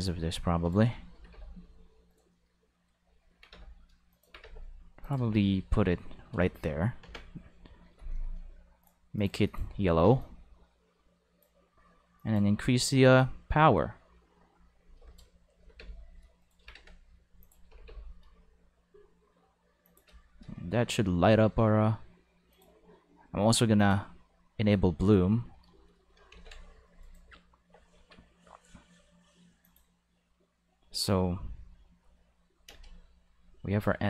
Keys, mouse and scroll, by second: 1.1 g, 1.2 5, 2.1 right click, 2.3 middle click, 3.3-4.5 typing, 4.1 click, 5.0 click, 7.0 Home, 7.1 5, 8.8 click, 9.2 click, 9.4 click, 10.2-11.5 drag, 12.2 click, 12.8 click, 13.2-15.2 drag, 15.6-17.7 typing, 17.4 click, 19.8 click, 22.5 click, 23.8 click, 26.3 ctrl+5, 27.9 alt+a, 28.1 5, 29.6 click, 32.7 space, 32.8 5.